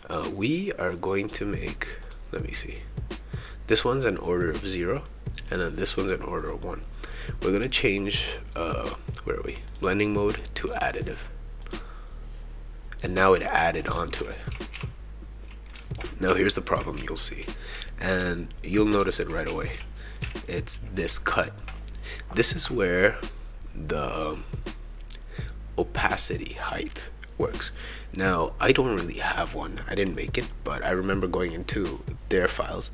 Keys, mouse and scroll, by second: 2.0 click, 5.5 click, 9.7 click, 10.7 click, 11.6 click, 13.0 right click, 13.9-21.5 typing, 18.7-21.4 shift+right drag, 28.6 click.